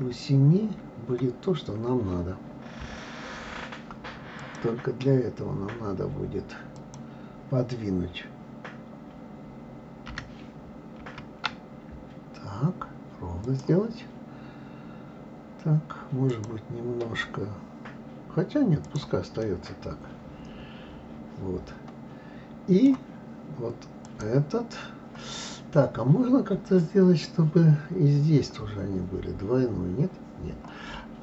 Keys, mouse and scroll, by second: 1.1 scroll up 1, 2.9 KP_3, 4.4 click, 6.7 click, 14.0-14.4 scroll down 2, 16.3 click, 18.8 click, 19.4-22.5 middle drag, 24.0 click.